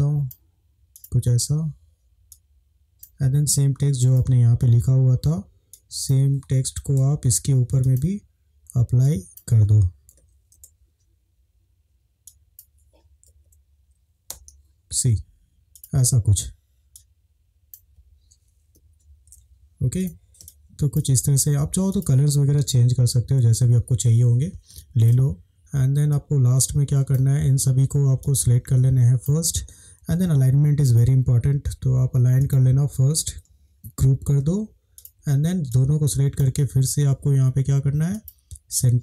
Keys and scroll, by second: 6.9 ctrl+c, 10.1 ctrl+v, 10.6 shift+Return, 13.3 ctrl+v, 14.2 Return, 18.8 Down, 19.0 Down, 20.5 space, 22.5 Up, 22.6 Up, 22.9 Up, 23.0 Up, 24.7 space, 34.1 ctrl+g.